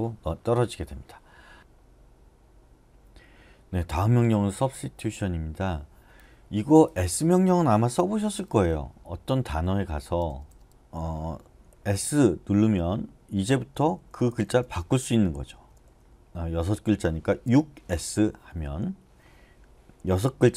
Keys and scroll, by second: 8.3-10.6 typing, 12.0 s, 13.2-18.0 typing, 15.5 Escape.